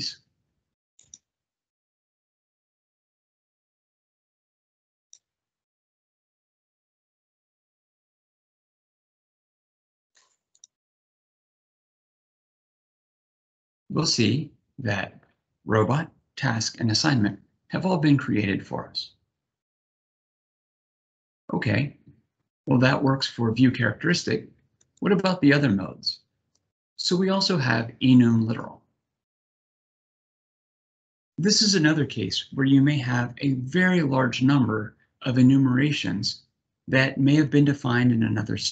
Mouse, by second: 1.5 click, 2.9 click, 4.6 click, 10.2 click, 11.1 click, 24.5 click.